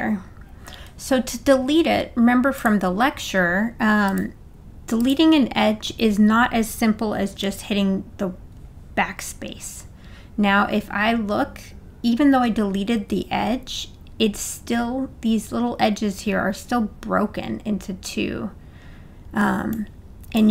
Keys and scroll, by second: 7.4 BackSpace.